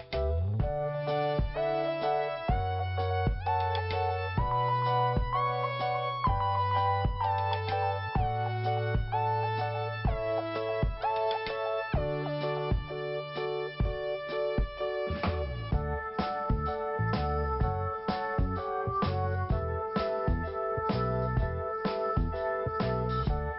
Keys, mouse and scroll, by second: 1.8 click, 4.2 click, 4.5 click, 7.0 scroll down 1, 9.5 scroll down 1, 11.8 p, 12.9 click, 14.4 click, 14.5 click, 15.5 click, 17.6 click, 18.1 i, 18.8-19.2 scroll down 2, 19.6-19.9 scroll up 1, 20.1 scroll up 1, 21.4 click, 22.4 click, 22.6 click, 23.1 click.